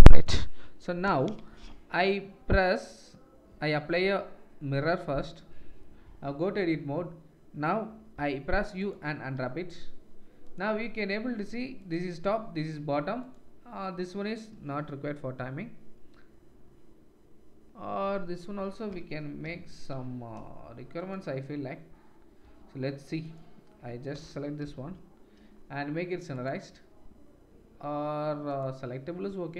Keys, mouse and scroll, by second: 0.0-24.9 drag, 0.0-10.5 middle drag, 0.0-10.5 right drag, 11.9-14.5 middle drag, 11.9-14.5 right drag, 23.3 middle click, 23.3 right click, 26.4 middle click.